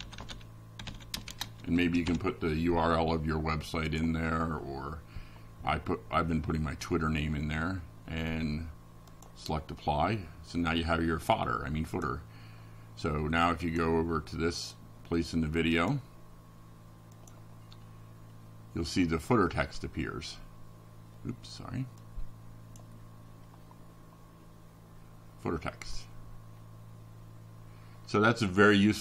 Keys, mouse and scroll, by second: 1.1 click, 16.7 click, 17.7 click, 21.7 click, 25.3-29.0 drag.